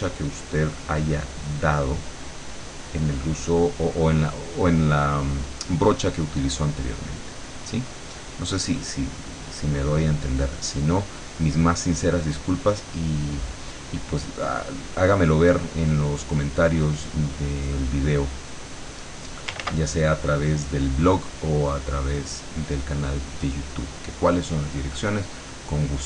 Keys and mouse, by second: 1.1-3.6 drag, 4.9 click, 5.9 click, 7.3 click, 8.6-9.6 drag, 15.5 click, 16.9 click, 18.2 click, 19.7 ctrl+z, 20.1 ctrl+click, 21.5-22.7 drag.